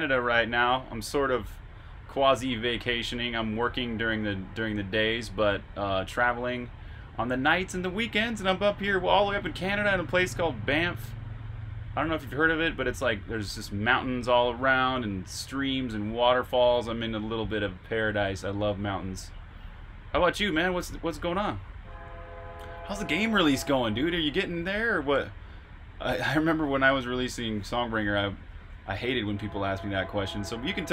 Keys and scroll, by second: 28.3-30.5 typing.